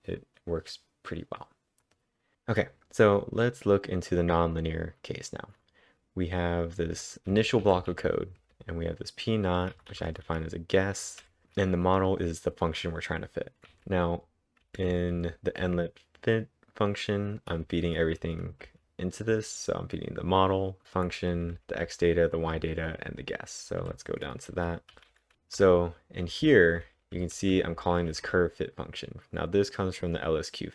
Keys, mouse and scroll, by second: 0.5-1.9 drag, 1.9 click, 6.9-8.4 typing, 9.7-11.2 typing, 13.6 typing, 14.9-15.7 typing, 17.6-28.7 typing, 29.3 Return.